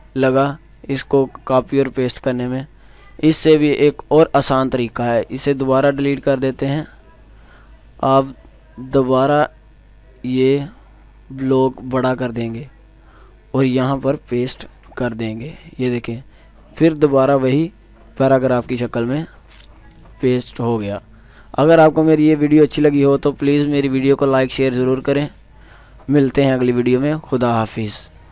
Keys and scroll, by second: 15.3 ctrl+v.